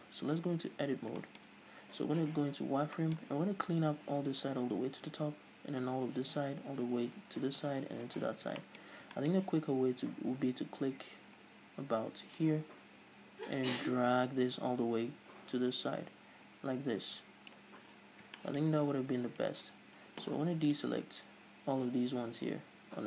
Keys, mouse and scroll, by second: 0.7 Tab, 1.2-12.4 shift+middle drag, 2.2 z, 8.4-9.1 scroll up 4, 12.4 click, 18.1-19.9 scroll up 4, 18.4-20.7 shift+middle drag, 19.9-20.7 scroll up 1, 20.7 scroll up 1, 20.7 ctrl+click.